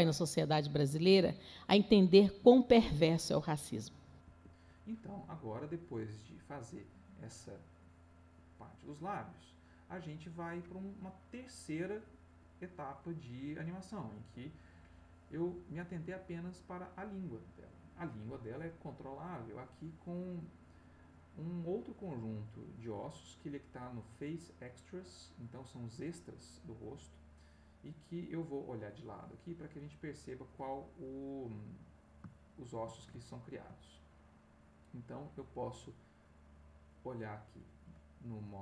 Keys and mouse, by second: 4.2 Escape, 5.7-9.1 drag, 14.0 click, 15.5 click, 26.9-28.0 middle drag, 29.3 click, 32.3-34.2 shift+middle drag, 37.3 click.